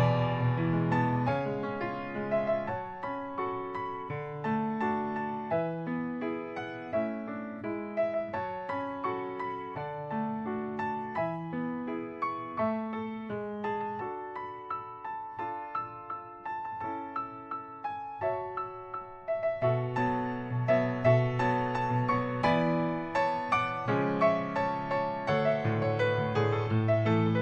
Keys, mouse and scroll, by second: 0.9 middle click, 1.5 middle click, 2.3 click, 2.7 middle click, 4.4 click, 4.6 h, 5.7 ctrl+z, 7.7 click, 10.4-11.3 scroll down 2, 11.3 click, 11.6 middle click, 12.9 click, 13.4 click, 14.9 scroll down 2, 15.9-16.4 scroll down 3, 16.4 shift+middle click, 17.4 scroll down 1, 17.7 shift+middle click, 18.5 shift+middle click, 18.9 middle click, 21.1 click, 21.8 middle click, 22.2 click, 22.4 scroll down 1, 22.9 middle click, 24.6 scroll up 1, 24.9 middle click, 27.0 click.